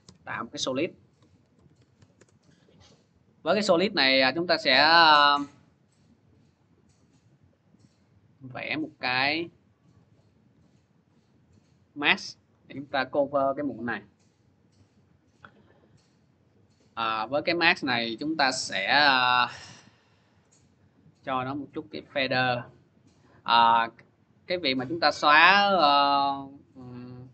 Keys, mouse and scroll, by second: 1.0-2.3 typing, 3.6 click, 6.0 click, 9.8 click, 10.3 v, 12.6 click, 13.0-14.0 scroll, 14.0-14.8 scroll, 15.8 click, 16.9 click, 17.9 scroll, 19.1 scroll down 1, 20.3-20.8 scroll down 1, 22.0 click, 22.1-23.0 scroll, 23.2 click, 25.5 click, 26.0 click, 26.6 click.